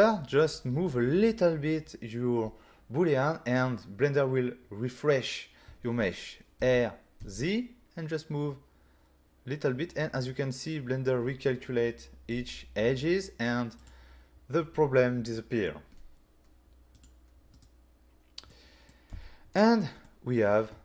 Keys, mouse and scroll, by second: 6.6 r, 7.2 z, 13.8 click, 17.0 click, 17.5 right click, 18.5 middle click, 19.5-20.0 scroll down 2, 20.0 middle click.